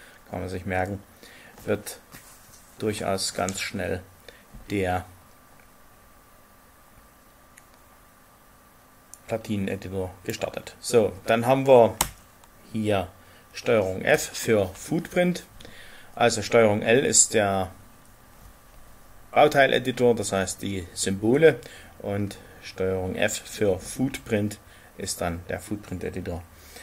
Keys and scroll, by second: 14.1 ctrl+f.